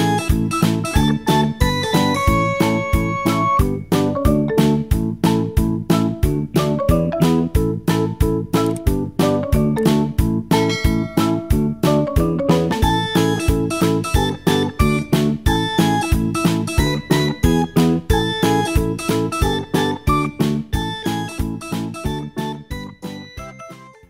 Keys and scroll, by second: 0.2 Return.